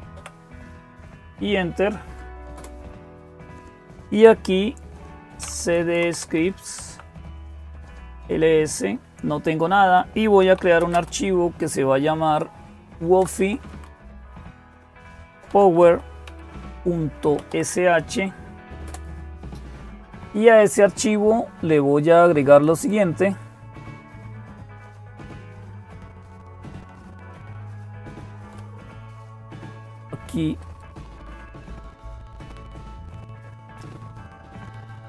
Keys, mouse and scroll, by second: 0.0-35.0 typing, 22.3-23.4 drag, 25.3 shift+Down, 26.0 shift+Down, 26.1-28.3 shift+Down, 30.4-31.7 right drag, 31.7-35.0 drag, 33.2-34.5 right drag.